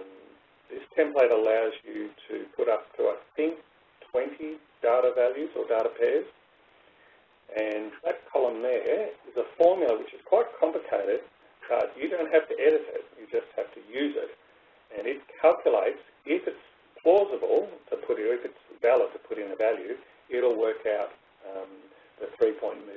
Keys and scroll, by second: 2.7 Up, 8.9 Right, 10.4 Down.